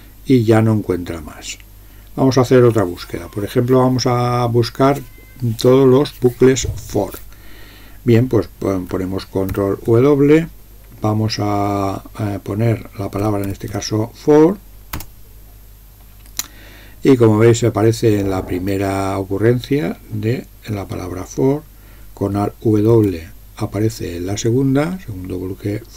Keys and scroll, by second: 9.6 ctrl+w, 13.0-14.3 typing, 15.0 Return, 23.1 alt+w.